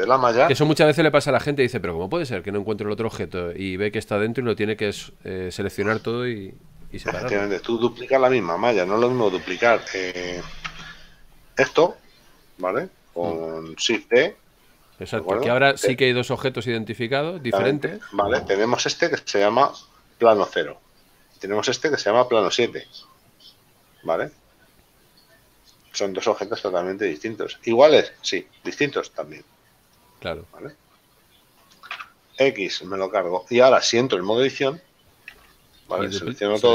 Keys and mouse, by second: 10.7 Tab, 14.0 shift+d, 16.0 click, 22.3 right click, 30.0 right click, 32.4 x, 32.7 click, 33.7 right click, 35.4 Tab.